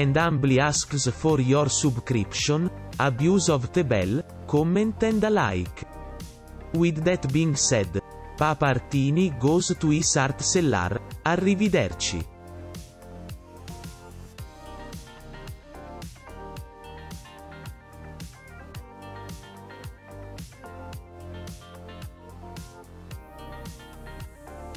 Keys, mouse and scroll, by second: 0.3 [, 0.8 [, 7.1 right click, 7.3 right click, 7.5 right click, 8.7 right click, 10.7 ,, 10.8 ,, 11.0 ., 11.3 ..